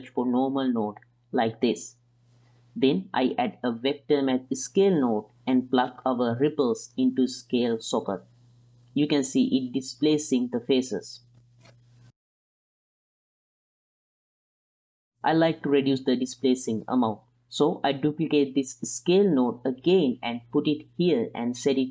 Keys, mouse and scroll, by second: 2.8-5.8 drag, 6.1 click, 6.4 drag, 7.4 drag, 7.5-8.4 drag, 8.6 alt+a, 8.9 ctrl+drag, 9.3-10.7 middle drag, 10.7 space, 12.8-14.9 middle drag, 14.9-15.8 drag, 14.9 space, 16.1-16.8 middle drag, 17.1 ctrl+drag, 18.0 shift+d, 21.3-21.9 drag.